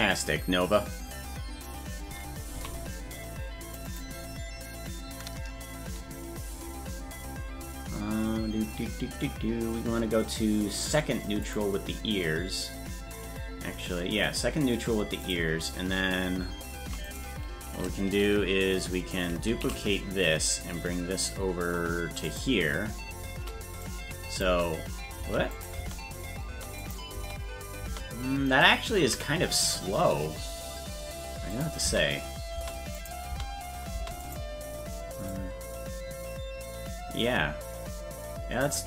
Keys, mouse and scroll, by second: 8.3-8.7 scroll down 1, 11.4 click, 11.4 scroll down 9, 15.2 click, 17.0 right click, 19.5 shift+d, 23.8 click, 25.6 click, 25.8 space, 26.8 click, 27.1 space, 29.0 a, 31.5 click, 31.8 space, 33.0 click, 33.0 space, 33.3 space, 34.2 click, 34.2 space, 35.3-38.6 drag.